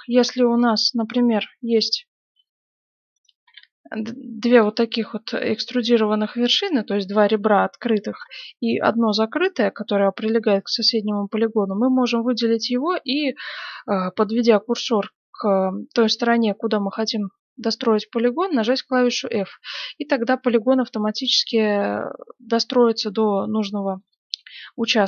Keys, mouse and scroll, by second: 0.5 right click, 1.3 e, 3.1 right click, 3.4 e, 8.7 right click, 18.6 f, 24.1-25.0 middle drag.